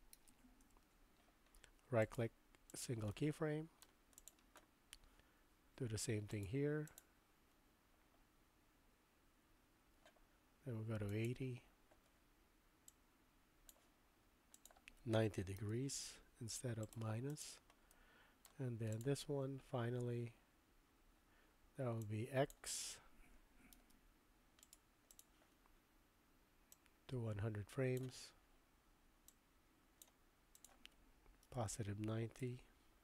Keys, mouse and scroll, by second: 2.1 right click, 3.1 middle click, 4.2 click, 6.5 click, 11.1 click, 12.9 click, 18.1 middle click, 18.9 click, 22.1 click, 23.8 super+z, 24.8 right click, 26.7-28.0 drag, 29.4 click, 30.6-33.0 drag.